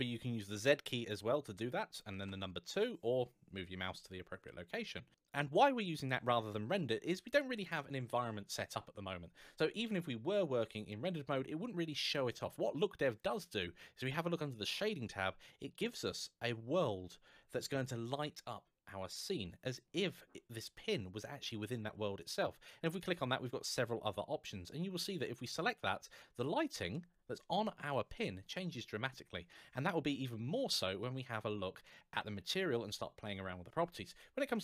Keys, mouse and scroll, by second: 5.0 middle click, 6.8 middle click, 14.5 click, 21.4 click, 24.9 click, 25.7 middle click, 34.4 click.